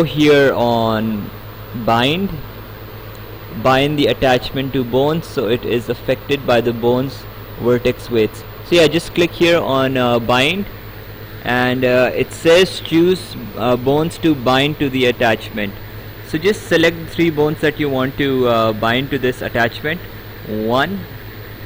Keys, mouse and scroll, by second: 10.2 click, 20.4 click.